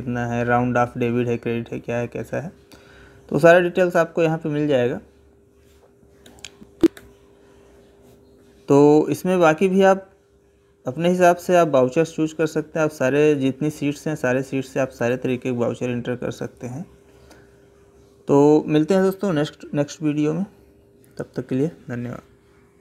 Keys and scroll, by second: 6.1 Escape, 14.7 Left.